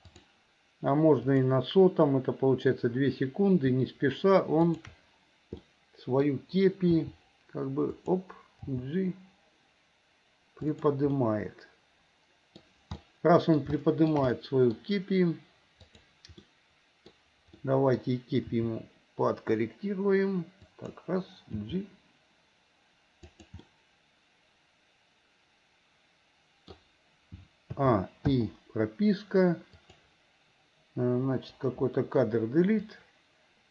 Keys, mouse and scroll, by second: 0.1 click, 1.4 click, 4.6 shift+click, 5.7 click, 7.0 r, 8.6 g, 11.2-12.6 middle drag, 13.0 scroll up 1, 13.1 middle click, 13.8 shift+middle click, 14.4-14.8 scroll up 1, 15.9 click, 16.4 middle click, 17.6 middle click, 18.6 r, 21.6 g, 23.6-25.4 middle drag, 25.4 scroll up 1, 25.5 middle click, 25.5 scroll down 1, 25.8-26.8 middle drag, 27.8 a, 28.4 i, 29.8 click, 31.4 Delete, 32.9-33.7 drag.